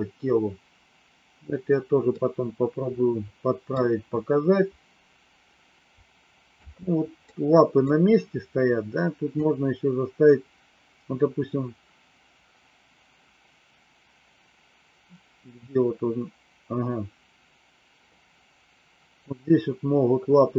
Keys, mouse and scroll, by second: 2.1-3.6 middle drag, 6.5 space, 7.3 middle click, 9.2-20.5 drag.